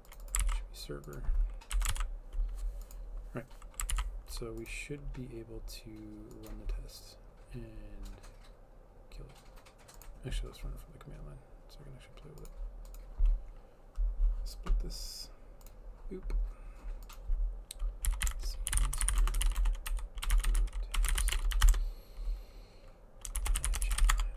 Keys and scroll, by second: 0.4 ctrl+c, 1.8 BackSpace, 1.9 ctrl+v, 4.0 ctrl+s, 17.8-24.3 typing.